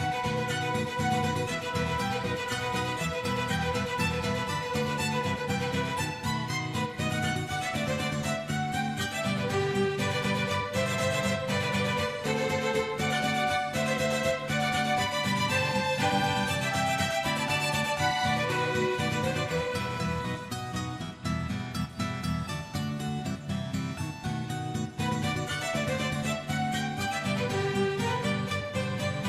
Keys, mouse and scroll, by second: 0.7 scroll up 3, 0.8 shift+middle click, 1.2-1.9 drag, 2.0 click, 2.6 click, 3.1 click, 4.0 click, 5.1 space, 5.4 space, 5.6-6.7 drag, 6.8 scroll down 2, 6.9 middle click, 7.1 shift+middle click, 7.3-7.8 shift+middle drag, 7.8 click, 8.0 click, 8.5 click, 9.2 click, 9.4 drag, 9.8 click, 10.1-10.4 drag, 10.6 click, 10.9 a, 11.5-12.2 drag, 12.6 ctrl+z, 12.7 click, 14.9-15.8 drag, 16.1 click, 16.3 click, 16.8-17.2 right drag, 17.4-17.7 right drag, 18.3-20.1 drag, 20.4-21.4 right drag, 21.4 click, 21.6-22.0 right drag, 22.3 click, 22.6-23.8 drag, 24.0 click, 24.7-25.3 drag, 25.6 click, 26.9 click, 27.5-28.6 drag, 28.7 click.